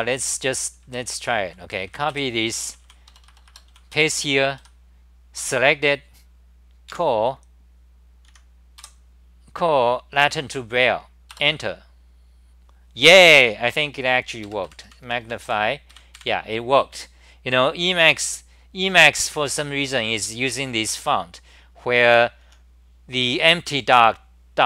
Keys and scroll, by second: 0.0-4.4 typing, 1.2 scroll down 10, 3.1 Return, 3.3 Return, 5.4 1, 7.5 a, 8.3 End, 8.8 k, 11.3 Return, 14.5 super+=, 14.7 super+=, 15.0 super+=, 15.2 super+=, 15.4 super+=, 15.9 super+=, 16.2 super+=, 21.5 c, 21.7 c, 23.3 n.